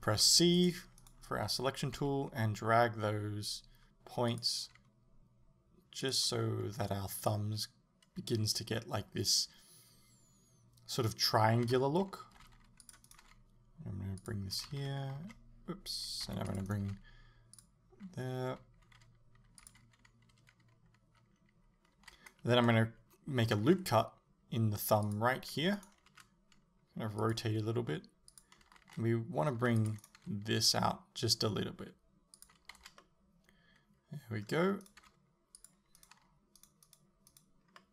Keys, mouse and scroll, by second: 0.6 c, 1.1 right click, 2.1 g, 4.4 click, 4.6 g, 11.7 a, 12.8 c, 13.3 g, 14.3 click, 14.7 a, 16.5 c, 16.9 g, 17.6 click, 18.6 g, 22.0 a, 23.6 ctrl+r, 25.9 right click, 26.1 r, 27.4 click, 27.5 g, 28.8 a, 29.8 c, 30.2 g, 32.5 click, 32.8 z, 33.0-34.9 middle drag, 34.9 right click, 35.0 g, 35.7 click, 36.0 right click, 36.2 g, 36.9 right click, 37.3 right click, 37.8-37.9 middle drag.